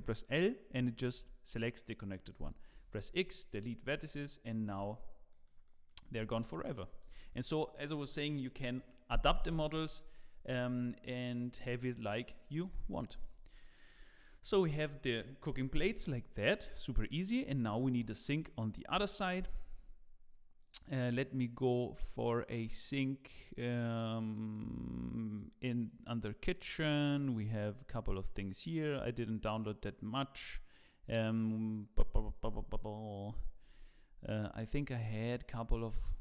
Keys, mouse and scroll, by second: 0.0 l, 2.7 l, 2.7 x.